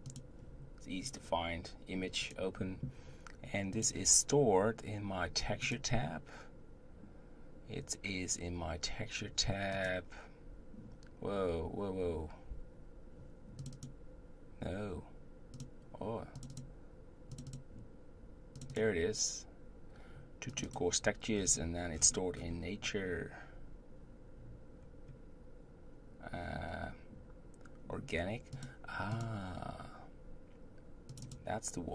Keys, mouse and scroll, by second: 0.1 click, 2.3-5.2 drag.